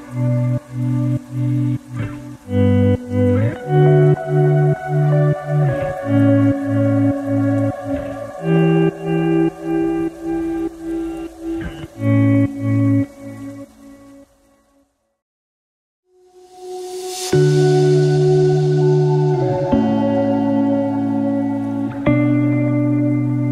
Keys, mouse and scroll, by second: 3.2 ctrl+z, 3.6 e.